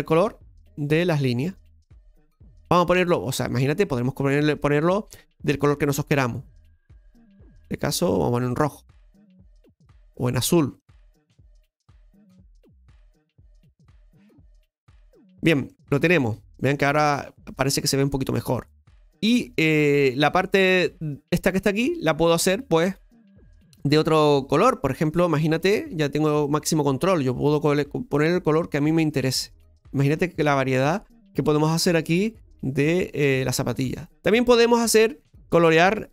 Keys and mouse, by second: 9.0-10.7 middle drag, 10.7-12.1 drag, 15.7-16.8 middle drag, 18.3-18.9 middle drag, 24.6 middle click, 26.4 click, 30.4-35.7 middle drag, 35.7 right click.